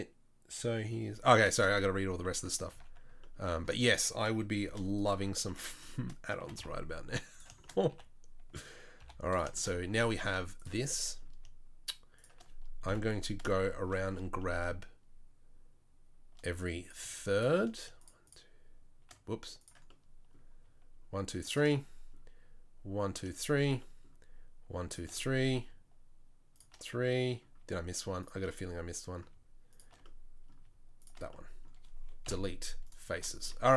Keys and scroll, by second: 2.7 ctrl+z, 4.6 shift+d, 6.4 g, 7.9 e, 10.2 3, 12.9 KP_7, 32.2 Delete.